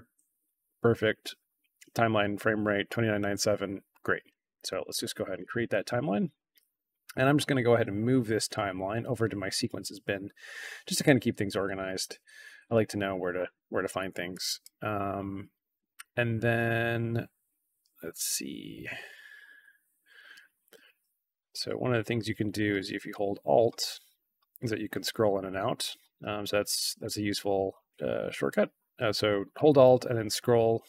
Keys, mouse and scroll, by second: 5.3 click, 7.2-9.5 drag, 11.0 click, 14.2-14.5 drag, 18.2-18.6 scroll up 1, 20.3 ctrl+scroll down 2, 20.6 ctrl+scroll up 2, 21.5 alt+scroll down 2, 21.8-23.3 alt+scroll up 6, 23.3 alt+scroll down 2, 24.0-24.5 alt+scroll up 4, 24.5-25.1 alt+scroll down 4, 25.1-25.7 alt+scroll up 4, 25.7-26.1 alt+scroll down 4, 26.1-27.3 alt+scroll up 6, 27.3 alt+scroll down 2, 27.9-28.4 drag, 29.9 alt+scroll down 2, 30.1 alt+scroll up 2, 30.4 alt+scroll down 2, 30.6-30.8 alt+scroll up 4.